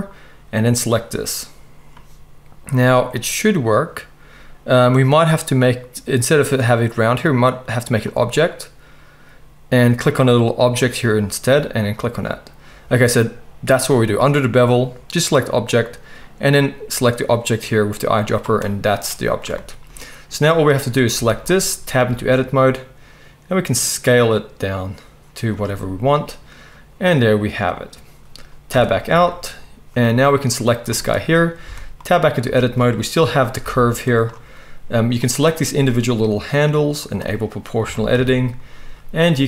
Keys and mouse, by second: 8.0 click, 8.0 middle click, 21.1 Tab, 22.0 s, 28.7 Tab, 29.4-31.9 drag, 31.6 Tab, 31.9 right click, 32.4-34.2 shift+drag, 33.6 g, 34.2 middle click, 35.1 click, 35.3-36.9 middle drag, 36.9 click, 37.1-39.4 middle drag, 37.8 g.